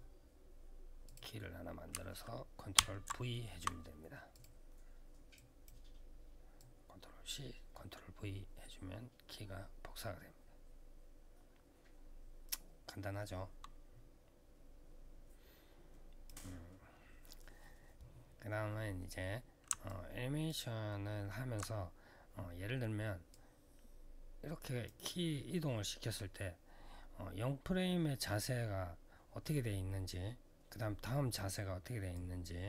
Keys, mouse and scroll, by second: 0.8 click, 2.5 ctrl+v, 4.1 click, 5.1 click, 6.3 click, 19.6 alt+click, 20.6 alt+middle click, 23.1 click, 31.9 click.